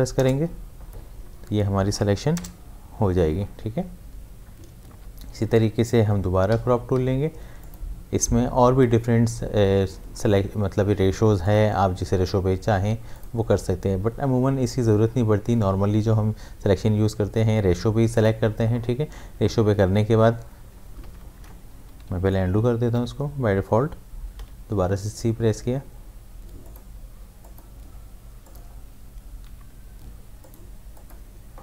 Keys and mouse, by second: 4.9 ctrl+z, 7.6 click, 11.4 click, 18.2 click, 22.9 v, 24.4 c, 26.6 click, 29.5 c, 30.4-31.6 drag.